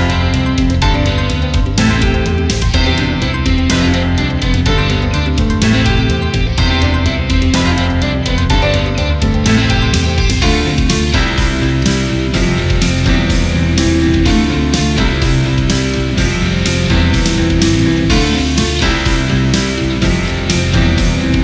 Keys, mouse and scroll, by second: 0.2 click, 0.5 scroll down 1, 0.9 alt+scroll up 1, 1.8 click, 2.1 alt+scroll down 1, 3.9 click, 3.9 click, 5.3 click, 5.5 right click, 5.9 click, 7.5 ctrl+t, 8.1-12.5 ctrl+drag, 12.9 Left, 13.9 ctrl+t, 14.3-17.6 ctrl+drag, 18.8 click, 19.2 typing, 19.8 click, 20.3 ctrl+z, 20.8 click, 21.2 ctrl+z.